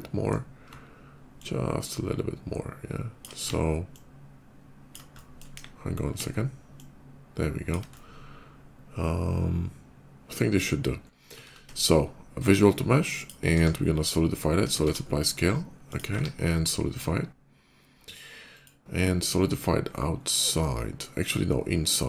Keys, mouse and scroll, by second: 1.2-3.0 ctrl+drag, 3.7-4.7 ctrl+drag, 4.9 ctrl+middle click, 5.3 KP_5, 6.6 ctrl+click, 7.6-10.4 ctrl+middle drag, 11.3 ctrl+a, 12.8 click, 13.2 q, 14.7 ctrl+a, 15.7 click, 15.9 q, 18.2 click.